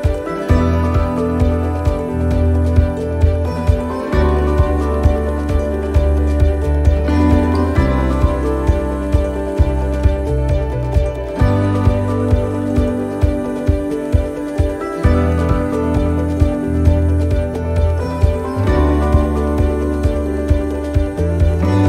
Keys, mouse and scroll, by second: 11.1 middle click, 11.1 scroll down 3, 11.5 scroll up 1, 12.6 shift+middle click, 13.3 shift+right click, 13.7-15.3 shift+right click, 16.3 shift+right click, 16.4 shift+right click, 18.2 click, 20.6 right click, 21.5 click.